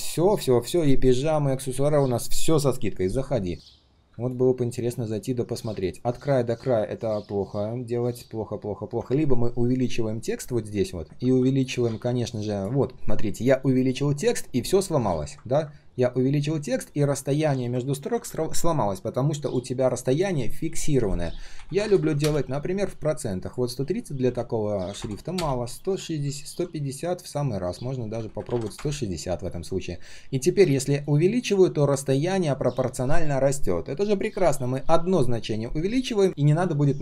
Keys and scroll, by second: 6.5 ctrl+shift+3, 7.1 ctrl+shift+3, 11.8 ctrl+z, 17.9 ctrl+z.